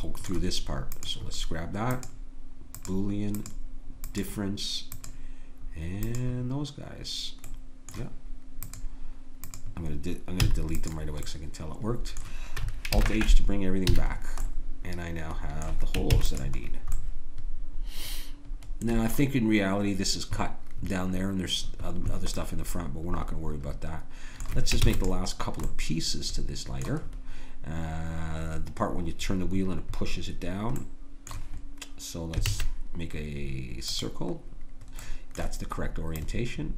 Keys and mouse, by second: 0.9-7.5 right drag, 7.5-13.0 drag, 10.4 x, 13.0 alt+h, 13.9 a, 16.1 ctrl+s, 22.4-23.5 middle drag, 24.9 ctrl+s, 32.5 shift+a, 35.1 middle click, 35.2 middle click, 36.2-36.7 drag.